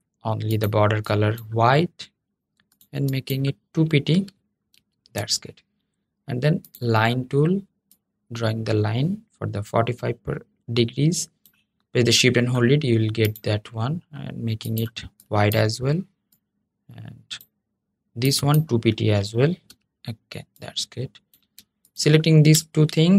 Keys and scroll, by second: 22.9 super+g.